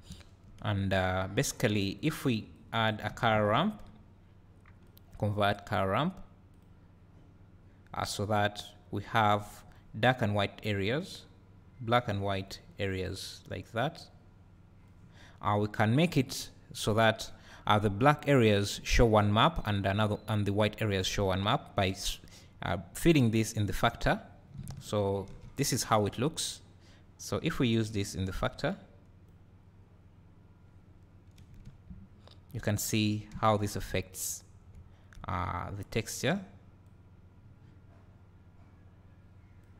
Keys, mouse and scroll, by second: 2.6 click, 6.6 click, 8.4-16.8 drag, 23.2-25.1 drag, 27.9-39.7 drag, 31.7 `, 32.9-33.3 scroll up 2, 34.3 scroll up 1, 34.7 `, 35.4 scroll down 1.